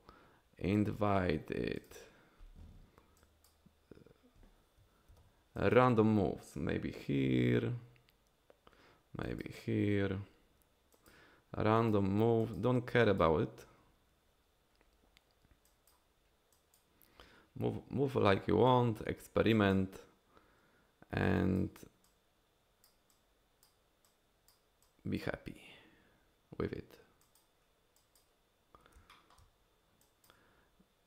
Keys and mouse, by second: 1.2 f, 1.8 f, 1.8 f, 3.1 drag, 5.1 ctrl+z, 5.6 drag, 9.2 drag, 10.9 drag, 11.7 drag, 12.4 drag, 13.0 drag, 15.6 drag, 16.5 drag, 18.7 drag, 19.5 drag, 21.2-21.6 drag, 22.0-22.8 drag, 23.1-23.6 drag, 24.0-24.5 drag, 24.8-25.2 drag, 27.2 drag, 27.9 drag, 29.1 shift+click, 30.0 drag.